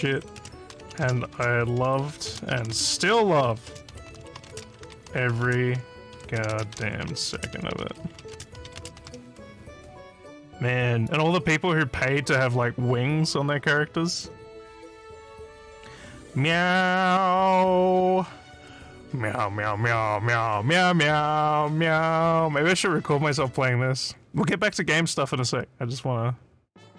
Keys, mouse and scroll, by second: 0.0-9.2 typing, 11.1 click, 14.1 scroll down 1, 15.1 scroll up 1, 16.0 scroll up 1, 23.3 click.